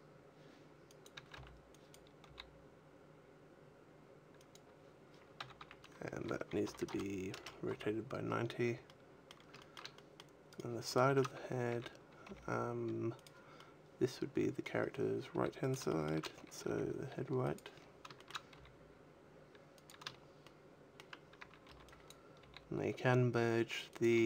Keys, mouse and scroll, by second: 0.7 click, 0.9 a, 1.7 b, 2.1 g, 4.4 click, 5.3 a, 5.5 a, 6.5 r, 8.1-8.7 scroll down 4, 8.1 a, 8.7 middle click, 9.5 shift+middle click, 9.8 middle click, 10.4 right click, 11.4 scroll down 3, 11.6 a, 12.1 g, 13.1 click, 13.4 middle click, 15.6 click, 15.6 g, 15.8 shift+middle click, 16.1-16.5 scroll up 3, 16.5 g, 17.4 click, 17.6-18.0 scroll up 2, 18.0 shift+middle click, 18.4 g, 19.8 click, 19.8 shift+scroll down 1, 20.2 shift+middle click, 21.0 scroll down 1, 21.2 a, 21.5 b, 22.3 g, 23.9 click, 24.0 a.